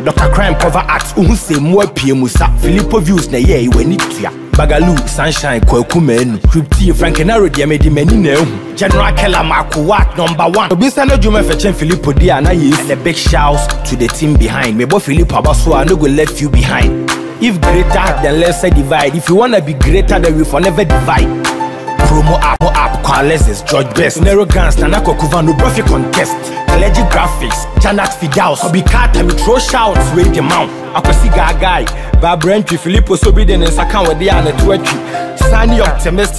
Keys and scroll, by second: 15.3 Escape, 27.3 Up, 28.9 Down.